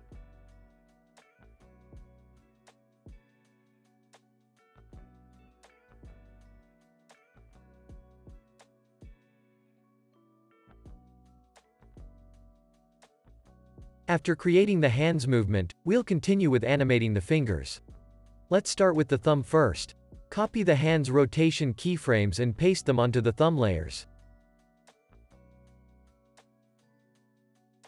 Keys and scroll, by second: 0.7 space, 0.9 super+s, 1.7 space, 7.9 4, 8.0 Return, 9.8-11.0 typing, 12.6 space, 14.3 space, 14.5 super+s, 21.5 super+c, 24.0 super+v, 25.0 space, 26.5 space, 26.7 super+s.